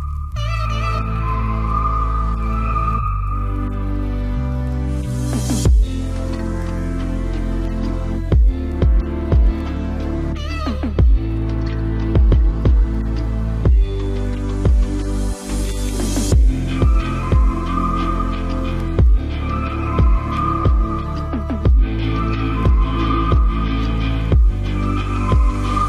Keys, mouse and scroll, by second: 3.7 middle click, 4.5 click, 4.9 c, 5.3-6.3 middle drag, 6.3-8.1 right drag, 6.6 ctrl+r, 9.0 ctrl+Tab, 10.4 right click, 10.8 c, 20.0-21.7 right drag, 21.7 ctrl+s, 23.6 c.